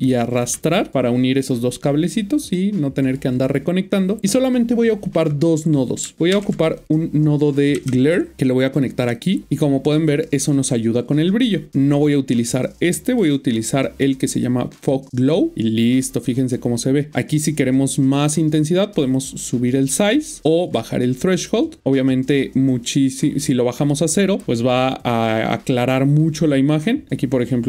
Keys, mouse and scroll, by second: 2.3 click, 6.7 typing, 6.7 click, 7.7 typing, 8.3 Return, 9.1 click, 13.0 click, 18.9 click, 27.1 click.